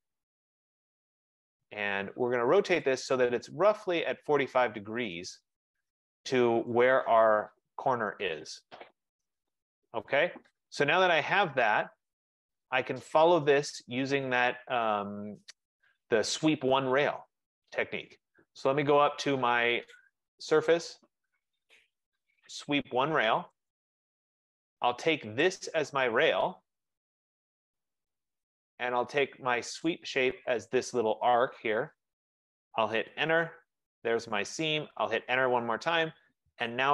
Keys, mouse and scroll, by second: 1.8 click, 3.0 click, 5.5 click, 7.0 right click, 7.4 middle click, 12.5 click, 20.2 click, 23.8 click, 25.5 click, 27.8 click, 30.4 F15, 30.6 click, 33.2 Return, 35.2 Return.